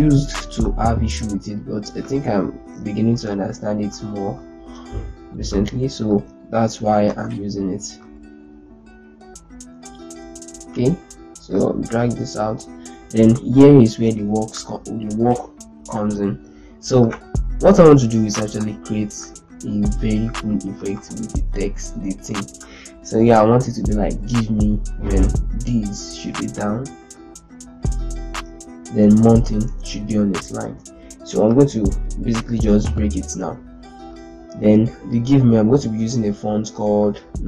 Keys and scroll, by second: 2.9 ctrl+space, 4.3 z, 6.8 ctrl+space, 17.2 z, 19.5 ctrl+space, 21.3 Return, 23.9 ctrl+Right, 24.2 ctrl+Right, 24.7 Return, 27.5 Left, 28.4 Down, 28.6 Right, 28.8 Left, 29.3 Return, 30.3 ctrl+space, 32.7 ctrl+k.